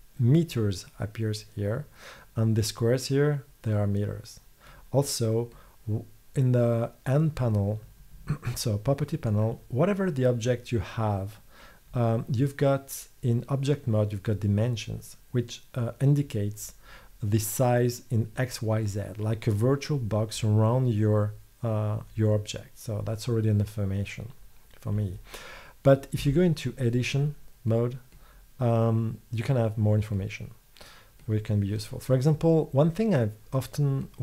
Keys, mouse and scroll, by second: 26.3 Tab, 27.8 click.